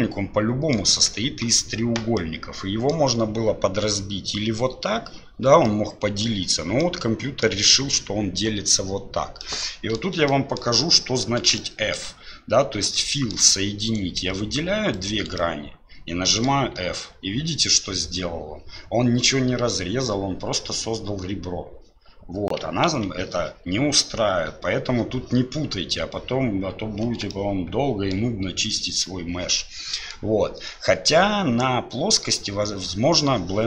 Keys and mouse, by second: 2.3 middle click, 5.8 middle click, 6.8 middle click, 9.6 middle click, 10.4 shift+middle click, 11.0 middle click, 11.7 shift+middle click, 13.1 shift+middle click, 13.9 right click, 15.0 shift+right click, 15.4-16.5 middle drag, 22.9 ctrl+z, 27.3 shift+middle click, 29.5 middle click.